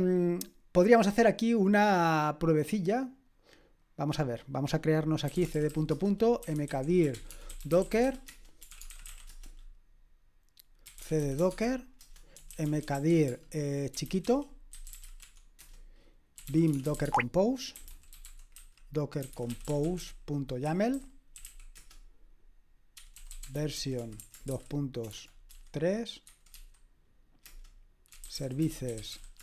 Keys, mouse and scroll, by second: 0.5-3.6 scroll down 1, 3.6 scroll down 1, 3.8-5.3 drag, 5.0-18.2 typing, 12.0 Return, 19.7-29.4 typing.